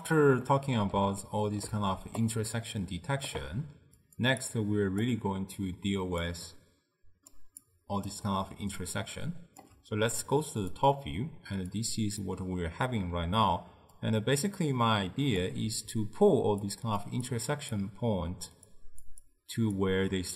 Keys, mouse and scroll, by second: 0.5-1.9 middle drag, 1.9 d, 2.3-3.4 right drag, 3.4 d, 4.1 click, 4.5 click, 6.1 click, 6.5 click, 7.7 click, 8.7 d, 8.9-9.7 right drag, 9.7 d, 10.6 click, 11.8-13.2 drag, 13.2-14.1 d, 14.1-15.4 drag, 15.4-20.0 typing, 16.8 drag, 17.4-17.8 drag, 18.8 click, 19.3-19.8 drag.